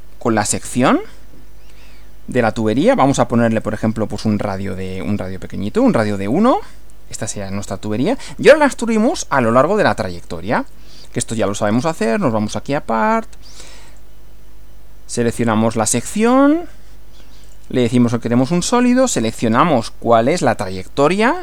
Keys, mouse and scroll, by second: 0.8 click, 3.5 click, 4.8 click, 5.6 1, 6.4 click, 7.6 middle click, 10.6 click, 11.7 click, 13.9 click, 15.4 click, 16.2 click, 17.5 click, 19.1 click.